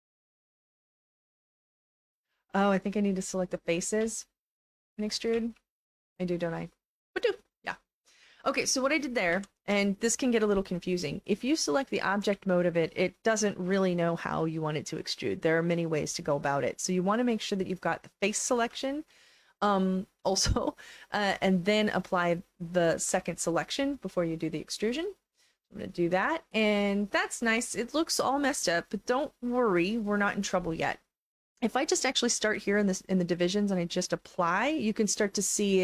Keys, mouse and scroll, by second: 0.2 r, 2.0 e, 2.2 right click, 3.2 click, 4.6 shift+click, 6.4 click, 9.3 ctrl+z, 11.1 right click, 11.3 click, 12.3 alt+click, 16.6 right click, 18.1 click, 18.8 alt+click, 19.9 alt+click, 21.9 shift+click, 25.3 click, 26.2-27.9 alt+drag, 33.1-35.8 drag.